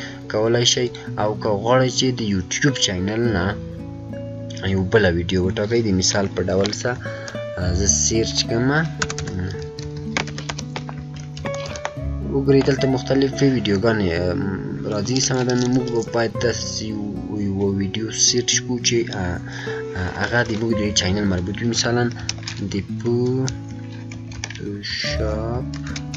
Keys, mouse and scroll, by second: 6.9 click, 6.9 typing, 9.3-12.1 typing, 14.8 typing, 14.9-17.8 drag, 20.1-22.1 drag, 22.1-26.1 typing.